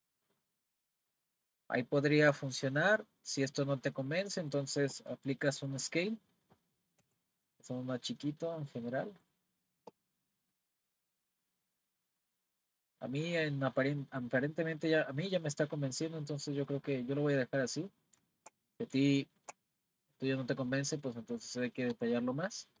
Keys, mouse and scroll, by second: 0.2 click, 1.5-5.1 middle drag, 5.1-5.5 scroll down 2, 5.5-7.0 middle drag, 7.0 s, 10.5 click, 11.8-13.2 middle drag, 13.2 click, 14.5-17.9 middle drag, 17.9-18.9 scroll up 1, 18.9 scroll up 1, 19.0-20.1 shift+middle drag, 20.1 click, 21.9 click, 22.3-22.8 middle drag.